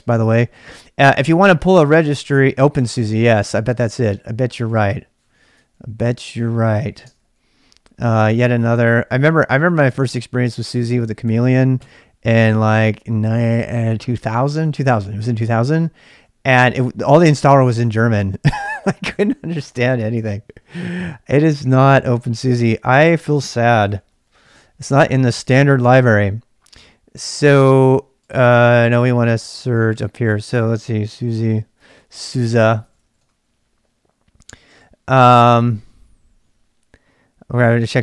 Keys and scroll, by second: 0.0-38.0 typing, 5.5 ctrl+[, 11.7 Return, 21.3 super+Tab.